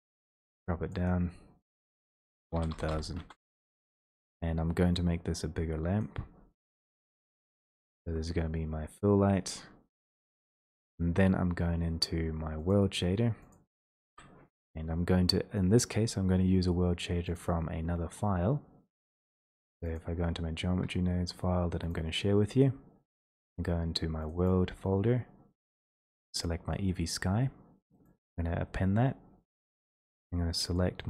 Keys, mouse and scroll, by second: 1.9 click, 2.0 click, 2.6 typing, 3.2 Return, 6.0 click, 7.1 w, 9.4 click, 10.9 click, 13.6 click, 14.1 Escape, 17.4 click, 20.0 click, 21.9 click, 24.5 click, 26.4 click, 28.1 click.